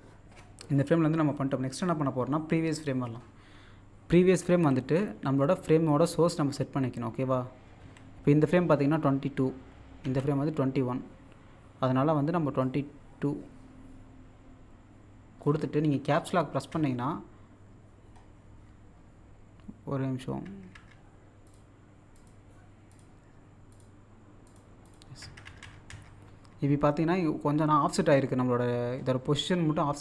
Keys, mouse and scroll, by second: 4.5 z, 7.8 x, 10.0 z, 12.6-16.7 drag, 17.9-18.9 scroll down 1, 21.5 click, 27.5-28.0 scroll down 1, 28.9 scroll up 1.